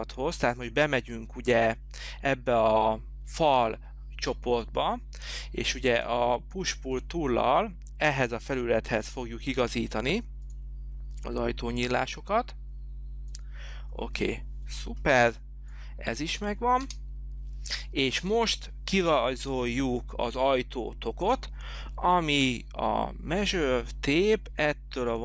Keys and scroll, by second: 15.3 h, 17.1 space, 17.7 space.